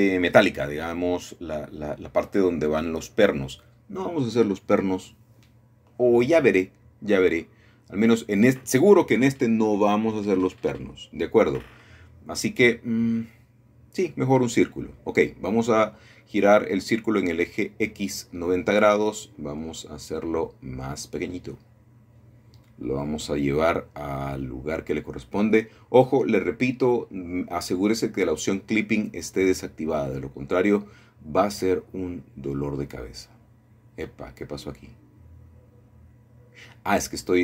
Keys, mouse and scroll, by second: 2.5-3.6 middle drag, 4.1 middle click, 5.9 middle click, 7.1-8.1 scroll down 1, 8.1-9.3 middle drag, 9.5-11.7 shift+middle drag, 10.6 Tab, 11.7 a, 11.8 a, 14.1 shift+a, 16.0-17.1 drag, 20.0 r, 22.2 x, 22.5 KP_9, 22.6 KP_0, 23.2 Return, 25.4 1, 27.6 s, 28.8 click, 30.3 middle click, 30.6 g, 30.8 y, 32.6-33.8 drag, 35.3 g, 36.3 x.